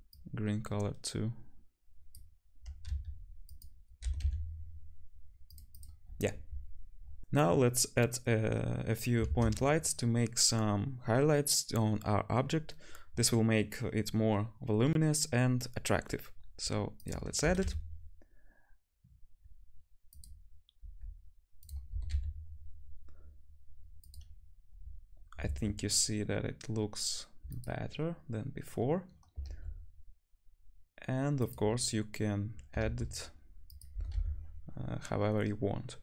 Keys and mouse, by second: 2.9 s, 4.0 g, 5.7 click, 5.7 middle click, 9.3 shift+a, 17.4 g, 20.8 g, 21.9 g, 25.4 shift+d, 29.5 shift+d, 32.8 shift+d, 33.9 g.